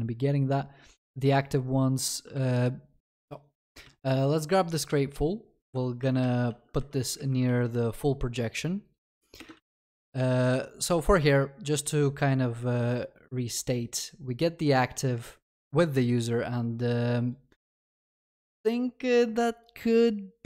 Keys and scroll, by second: 2.4 ctrl+c, 6.2 ctrl+v, 7.2 alt+shift+Down, 7.5 ctrl+s, 17.7 ctrl+c.